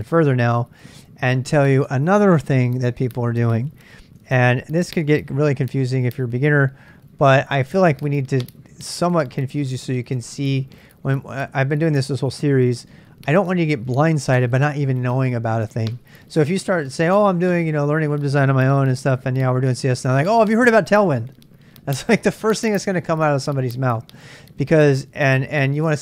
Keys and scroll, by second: 4.2 super+Tab, 5.6 super+Tab.